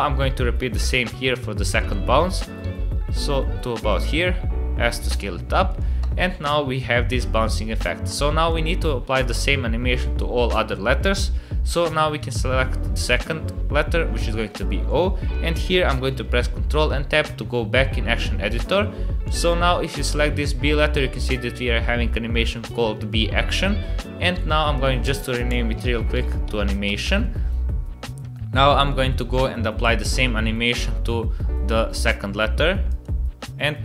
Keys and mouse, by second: 0.6 g, 2.6 g, 4.1 s, 5.3 s, 6.0 space, 8.1 space, 8.4 click, 9.2 click, 16.7 ctrl+Tab, 24.7-27.8 drag, 28.5 click, 30.8-33.0 drag.